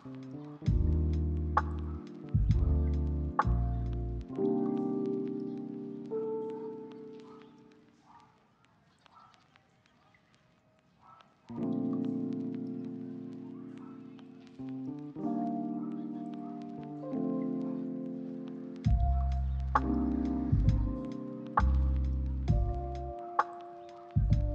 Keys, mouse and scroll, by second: 0.2 right click, 0.7 double click, 10.7 ctrl+middle click, 11.7 ctrl+middle click, 12.4 shift+middle click, 14.4 ctrl+<, 14.6 ctrl+z, 14.9 s, 15.0 right click, 16.2 double click, 23.0 ctrl+middle click, 23.5 middle click, 24.0 double click, 24.4 middle click.